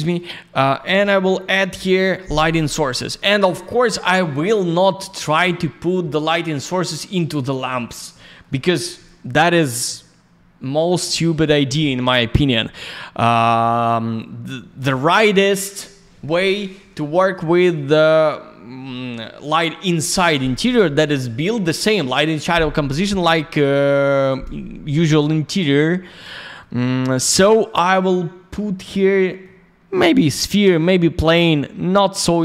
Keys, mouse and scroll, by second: 0.1 click, 7.0 alt+middle click, 7.7 alt+я, 7.8 click, 7.9 click, 8.1 middle click, 8.5 alt+middle click, 8.9 alt+я, 9.0 click, 25.4 click, 25.5 click, 26.1 alt+middle click, 26.7 middle click.